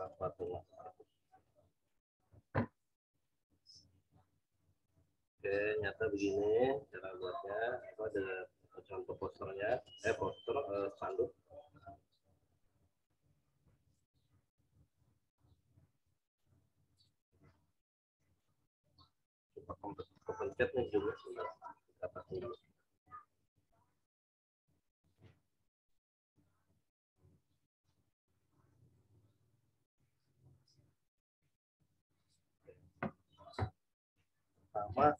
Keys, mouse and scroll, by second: 10.0 click, 27.8 click, 34.4 click.